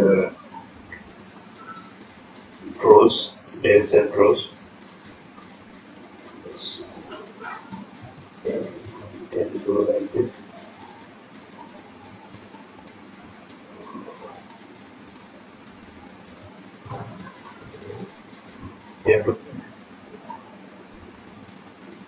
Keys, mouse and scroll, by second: 2.7 click, 3.1 scroll down 1, 3.2-4.0 scroll up 4, 3.5 shift+middle click, 4.1 click, 5.6 click, 7.4 click, 12.2-12.6 scroll down 5, 12.6-13.3 scroll up 6, 12.8 shift+middle click, 13.3 click, 14.8 click, 15.6 click, 16.7 click, 18.1 scroll down 5, 19.0 scroll down 3, 19.6 shift+middle click, 20.0-20.6 scroll up 2, 20.4 click.